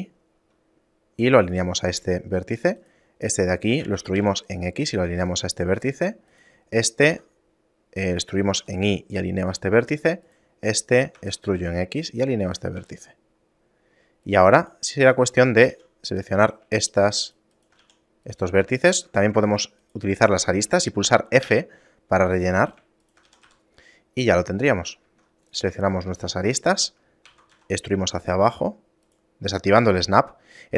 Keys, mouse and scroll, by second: 2.4 middle click, 2.9 right click, 4.0 e, 6.0 middle click, 6.4 right click, 7.2 e, 10.4 right click, 10.7 middle click, 11.3 e, 12.9 a, 13.2 middle click, 13.5 scroll down 2, 14.4 right click, 14.8 shift+right click, 15.2 right click, 15.8 f, 16.2 right click, 17.0 shift+right click, 17.4 shift+right click, 18.0 f, 18.4 right click, 19.2 ctrl+Tab, 20.0 right click, 20.4 right click, 21.6 f, 22.8 right click, 23.2 shift+right click, 23.4 f, 23.6 a, 24.1 middle click, 25.2 ctrl+Tab, 26.0 alt+right click, 26.5 shift+middle click, 27.4 e.